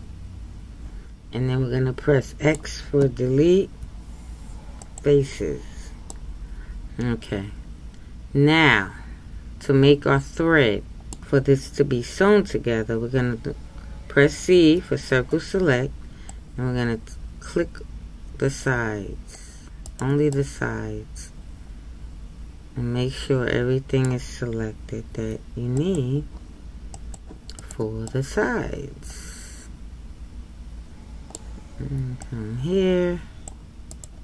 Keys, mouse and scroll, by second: 6.1 middle click, 20.3-23.3 middle drag, 28.1-31.1 middle drag.